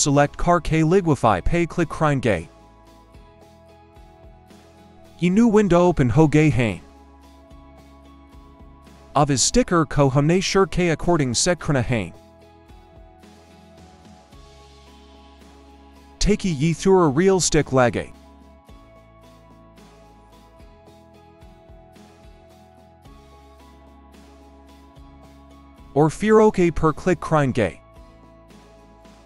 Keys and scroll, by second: 11.6 ], 12.2 ].